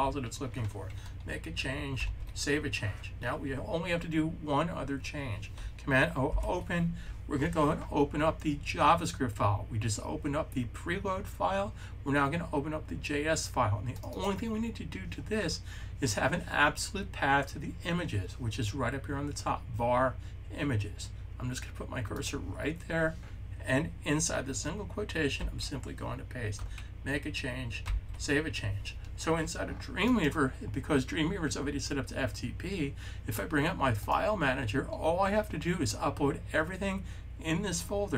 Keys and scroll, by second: 1.8 s, 6.2 super+o, 25.3 super+v, 27.7 super+s.